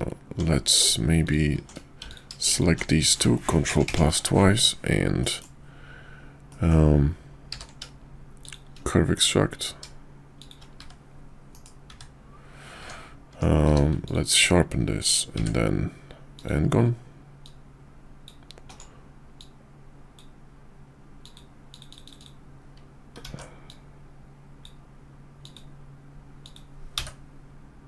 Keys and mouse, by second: 1.2 alt+shift+click, 2.1 alt+click, 2.5 alt+shift+click, 3.6 ctrl+KP_Add, 5.2 middle click, 6.5 middle click, 7.5 q, 11.5 KP_5, 12.8 Tab, 13.6 q, 15.3 d, 17.4-18.3 drag, 19.4-20.2 drag, 22.2 click, 23.2 ctrl+z, 23.7-24.6 drag.